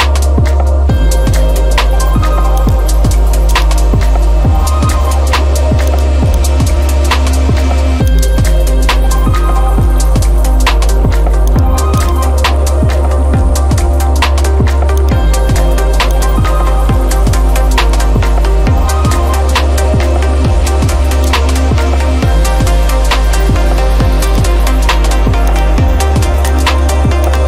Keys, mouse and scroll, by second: 0.0-0.9 scroll, 0.9 scroll, 2.7 click, 3.6 click, 6.0 click, 6.5 click, 8.2 right click, 11.6-12.7 drag, 13.8-14.9 middle drag, 15.1 click, 17.3 scroll down 1, 18.1 scroll down 2, 18.8 middle click, 19.8 scroll up 1, 20.0 scroll down 1, 20.1 scroll up 1, 20.2-20.6 scroll down 2, 20.9 scroll, 21.3 click, 22.7 scroll up 1, 24.4 click, 24.4 scroll, 25.6 ctrl+click, 26.6 ctrl+click.